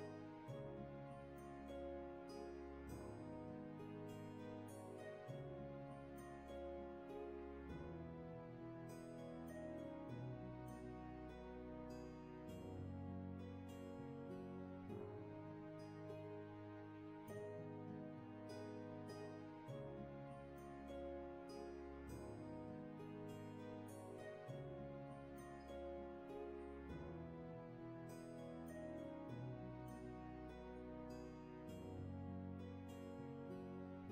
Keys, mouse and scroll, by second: 20.7 shift+space, 21.2 space, 30.1 space.